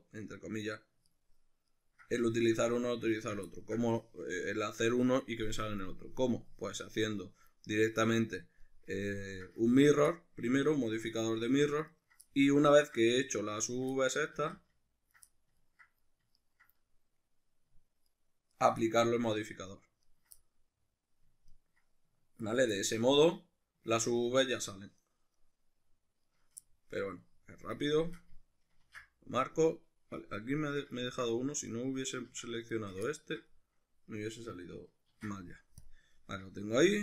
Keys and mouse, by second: 1.1 ctrl+right drag, 1.7 ctrl+right click, 3.2 ctrl+right click, 3.3-9.7 ctrl+middle drag, 9.7 ctrl+right click, 10.1-11.9 middle drag, 11.9 ctrl+right click, 12.3-13.7 middle drag, 13.7 ctrl+right click, 13.9-16.4 middle drag, 14.4 ctrl+z, 16.4 ctrl+right click, 16.8-18.1 middle drag, 18.1 ctrl+right click, 18.5 ctrl+right click, 18.8-20.0 middle drag, 20.0 ctrl+right click, 20.2-21.5 middle drag, 21.5 ctrl+right click, 21.6 middle click, 22.4 ctrl+right click, 22.7-24.1 ctrl+middle drag, 24.1 ctrl+right click, 25.0 ctrl+right click, 25.4 ctrl+right click, 26.3 ctrl+right click, 26.7-31.0 ctrl+middle drag, 28.9 ctrl+e, 30.1 Escape, 31.0 ctrl+right drag, 31.7-32.7 middle drag, 32.3 ctrl+z, 32.7 shift+right click, 33.1-37.0 ctrl+middle drag, 35.1 ctrl+e.